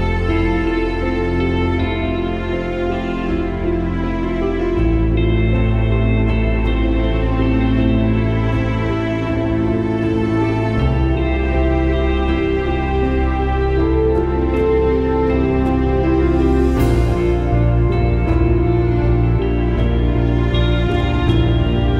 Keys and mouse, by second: 2.2 click, 2.6 space, 3.4 click, 3.4 space, 5.4 ctrl+-, 6.9 click, 7.2 click, 7.6 ctrl+-, 10.1 click, 13.2 alt+click, 17.7 click, 20.3 alt+click.